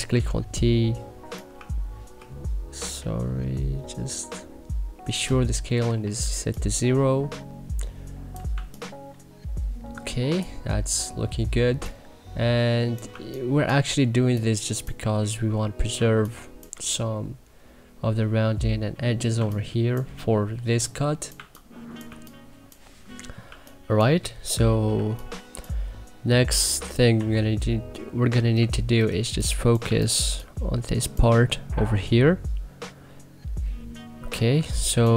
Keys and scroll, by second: 5.8 e, 8.5 1, 13.1 2, 15.9 1, 19.3 2, 21.3 1, 22.0 2, 24.8 1, 26.5 c, 27.1 e, 29.2 3, 29.8 1, 30.2 3.